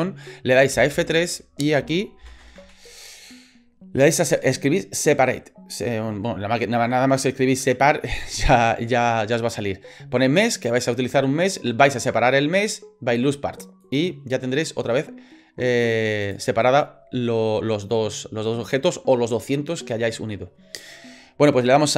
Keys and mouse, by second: 0.7 F3, 16.0 click.